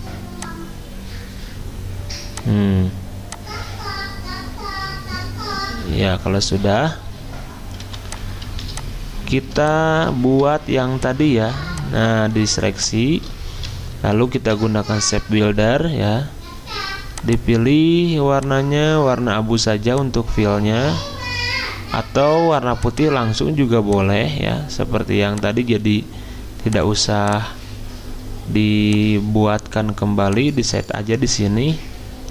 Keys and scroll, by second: 7.8 v, 8.4 z, 10.3 v, 14.3 m.